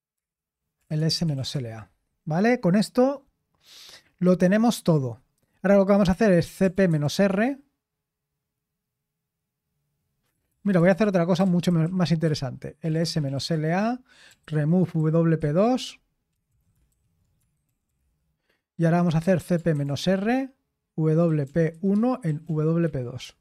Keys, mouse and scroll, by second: 0.1-2.0 typing, 3.3-4.1 typing, 6.2-7.5 typing, 10.3-15.9 typing, 16.5 ctrl+a, 16.9 alt+f, 17.4-18.1 typing, 19.2-19.5 typing, 19.8 Return, 21.0-23.4 typing.